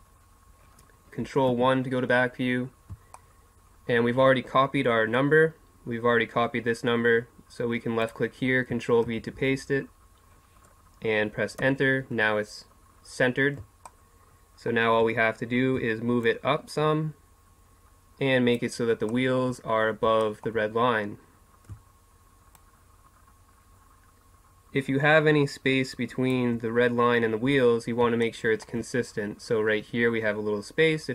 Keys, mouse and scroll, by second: 1.5 ctrl+KP_1, 3.4 middle click, 8.0-9.7 drag, 11.6-13.9 middle drag, 16.2-18.1 drag, 19.7-20.7 middle drag, 22.6-24.4 drag, 24.4-28.3 middle drag.